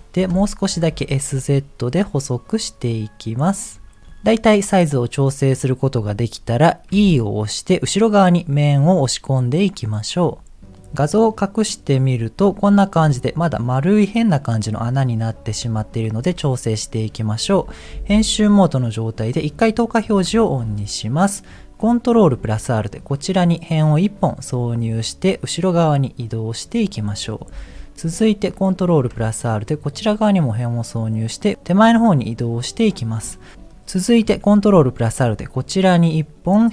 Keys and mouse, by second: 0.8 s, 5.0 middle click, 6.9 e, 10.7 middle click, 11.6 click, 12.2 middle click, 16.3 middle click, 17.5 Tab, 18.1 middle click, 19.3 click, 20.4 middle click, 20.9 middle click, 21.8 ctrl+r, 27.1 middle click, 27.6 middle click, 28.7 ctrl+r, 33.0 middle click, 33.5 middle click, 34.4 ctrl+r.